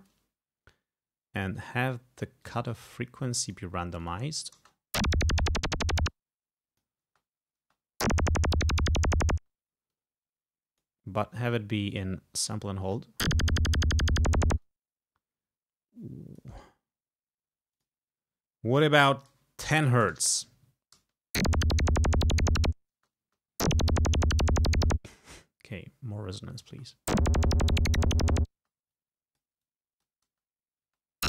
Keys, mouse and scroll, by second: 1.7 click, 2.5-3.8 drag, 4.1 click, 4.7 space, 6.1 space, 6.2 click, 7.1 space, 9.5 space, 10.0-11.1 drag, 12.0 click, 12.9 space, 14.5 space, 14.7-16.8 drag, 16.6 right click, 17.8 click, 19.8 0, 20.1 Return, 21.0 space, 23.0 space, 25.0 space, 25.8 click, 26.8 space, 28.6 space, 29.0 click, 29.7 click, 30.3 space.